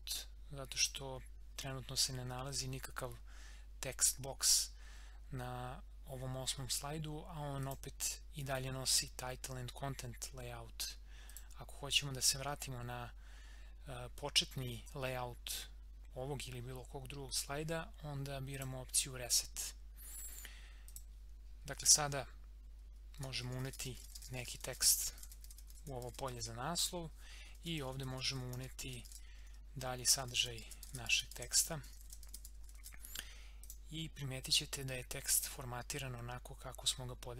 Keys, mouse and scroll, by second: 0.8 click, 7.6 click, 11.2 click, 18.5 click, 22.8-33.3 typing, 26.8 click, 33.6 click.